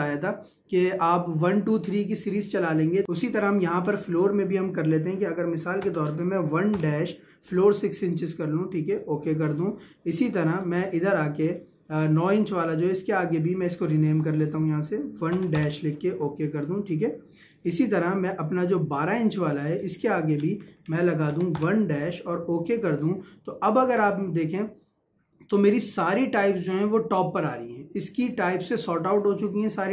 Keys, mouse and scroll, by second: 3.7 Left, 8.2-10.6 drag, 20.7 Left, 22.9 click.